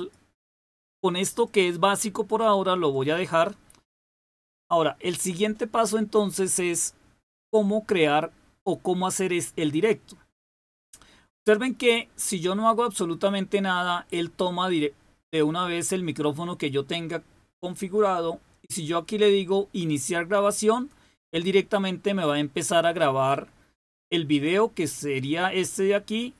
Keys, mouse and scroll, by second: 0.7 click, 1.3 click, 2.2 click, 2.8 click, 4.0 click.